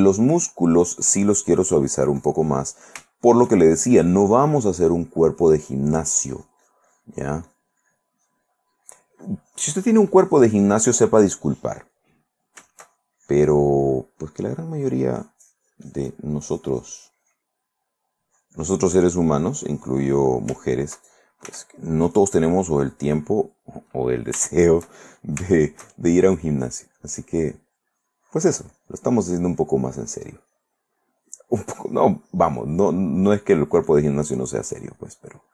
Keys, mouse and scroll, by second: 2.4 click, 3.3 shift+middle click, 3.9-12.2 shift+drag, 12.3 click, 13.0-14.9 shift+drag, 15.0-17.8 drag, 17.8 middle click, 18.5-20.7 drag, 20.7 shift+middle click, 21.7 f, 22.4 click, 22.8 click, 24.1 middle click, 25.0 shift+middle click, 26.1 shift+middle click, 27.2-30.4 drag, 30.4-32.3 drag, 32.8-35.5 drag.